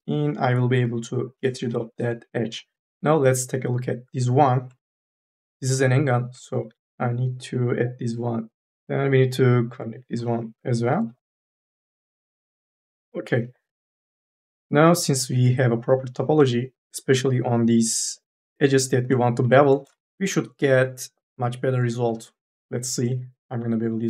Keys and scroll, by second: 0.5-2.7 typing, 5.2 3, 5.9 1, 6.4 m, 6.8 e, 8.6 3, 10.6 3, 10.8 e, 12.0 2, 23.3 m, 23.3 s.